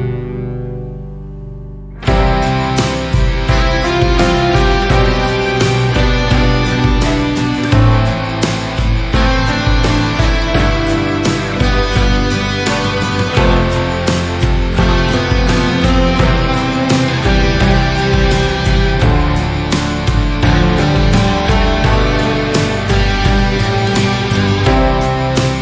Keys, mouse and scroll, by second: 0.6-3.5 drag, 3.5 Tab, 4.0 click, 4.4 click, 7.6 click, 9.0 Tab, 9.1 scroll down 3, 9.3-10.1 middle drag, 10.1 scroll up 3, 10.4 Tab, 10.8-11.8 middle drag, 11.8 3, 12.1 click, 12.8 shift+click, 14.2 i, 16.2 Tab, 16.4 scroll down 1, 16.6 middle click, 17.1 scroll up 2, 17.3-18.4 middle drag, 18.4 scroll up 1, 18.7 Tab, 18.9-19.5 scroll down 2, 19.5 1, 19.7 click, 20.1 click, 21.1 Tab, 21.3 scroll down 4, 21.6 middle click, 21.8 scroll up 4, 22.3 scroll down 1, 22.6-23.5 middle drag, 23.5 Tab, 23.7 middle click, 23.9 scroll up 2, 24.6 3, 24.9 click.